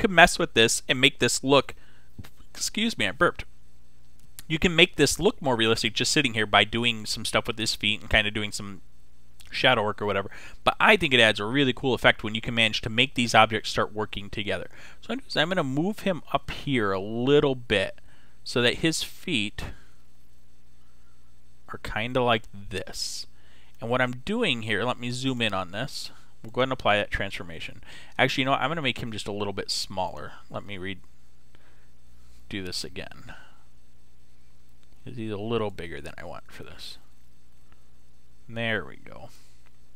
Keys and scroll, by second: 32.6 super+t.